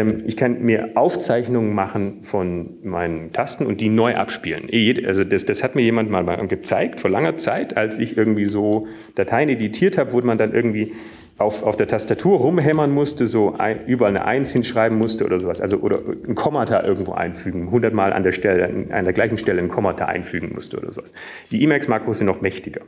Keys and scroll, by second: 2.1 Up, 3.0 Up, 3.6 Down, 13.3-14.5 Down, 15.3 Down, 15.8 Up, 15.8 Return, 16.5-18.2 typing, 19.5 typing, 20.8 typing, 22.0-22.8 typing.